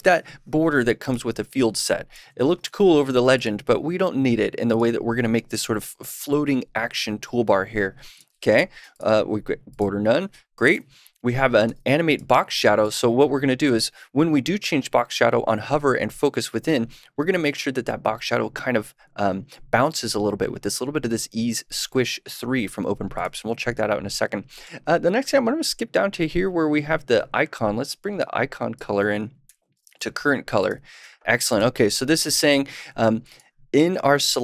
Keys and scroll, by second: 2.1 super+/, 2.6 super+s, 10.7 super+/, 11.8 super+s, 29.4 super+/, 29.8 super+s.